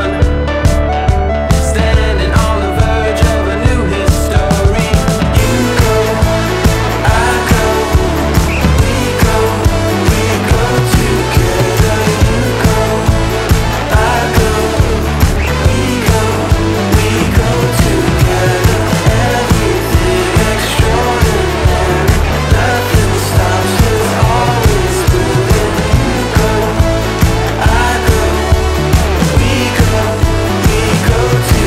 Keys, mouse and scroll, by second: 5.2-7.5 drag, 10.9 click, 13.2 click, 15.5 click, 17.7 click, 24.7-27.6 drag.